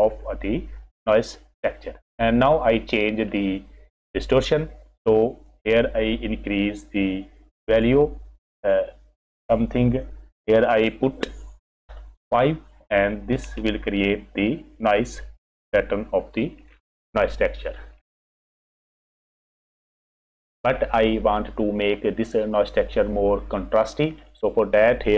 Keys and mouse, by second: 2.3 click, 5.5-8.6 drag, 10.8-12.3 drag, 17.3 click, 24.5 click.